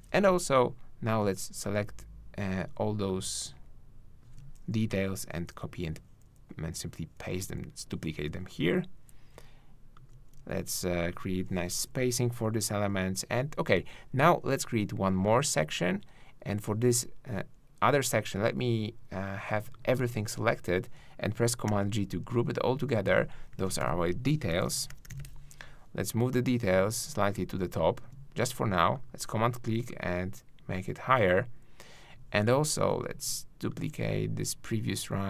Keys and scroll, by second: 0.6 super+Down, 5.1 alt+shift+Down, 9.3 super+Up, 11.7 super+Up, 21.7 super+g.